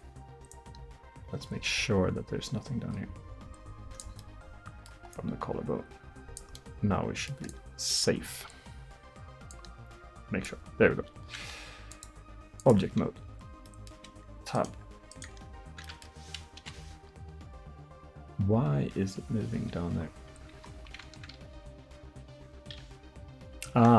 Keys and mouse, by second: 1.2-2.5 drag, 2.5-4.3 middle drag, 5.2-6.8 drag, 6.8-7.2 middle drag, 7.5-9.1 middle drag, 9.1-11.5 drag, 12.7-13.7 drag, 13.7 middle drag, 14.1 Tab, 15.0 Tab, 16.6 KP_1, 17.3 r, 21.6 r.